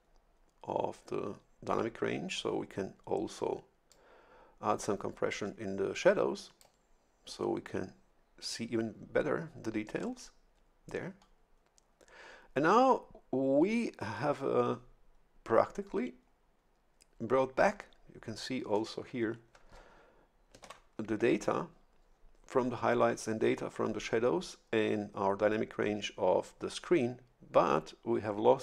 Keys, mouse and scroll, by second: 3.9-7.1 drag, 20.6 shift+F11.